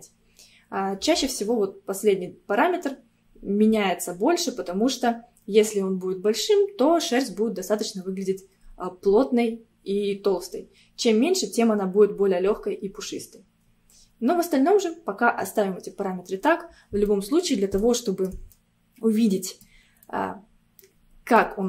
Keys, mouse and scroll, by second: 13.1-13.7 scroll down 2, 15.0-15.5 scroll up 2, 15.6-17.1 scroll up 3, 17.1-21.6 middle drag.